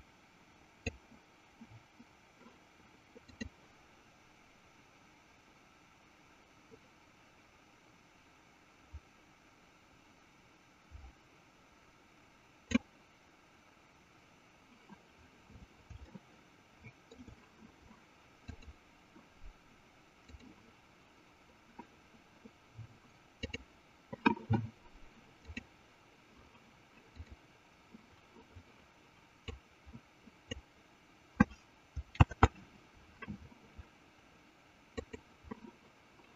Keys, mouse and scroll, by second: 3.1 click, 3.6-13.1 drag, 16.4 shift+middle click, 18.5-20.8 drag, 23.4 click, 25.4 click, 27.0 click, 29.9-31.0 drag, 32.6 ctrl+z, 34.8 click.